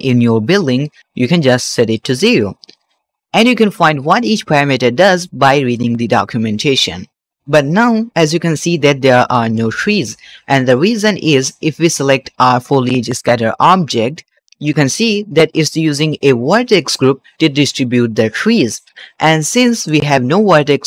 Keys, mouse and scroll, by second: 0.5-1.8 scroll down 6, 1.8-2.8 drag, 7.5-9.4 middle drag, 9.6 shift+middle click, 13.3 click, 18.8 click, 19.6 click, 20.4 click.